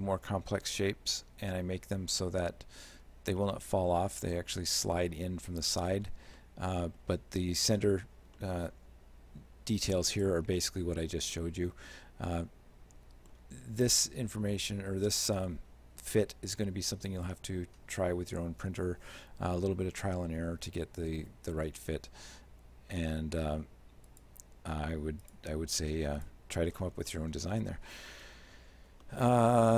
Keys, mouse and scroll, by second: 3.4 shift+middle click, 6.4 shift+middle click, 8.4 shift+middle click, 11.4 shift+middle click, 24.1 click, 25.3 shift+click, 26.2 click, 27.0 scroll down 2, 27.1 middle click, 28.3 alt+h, 29.1 shift+middle click.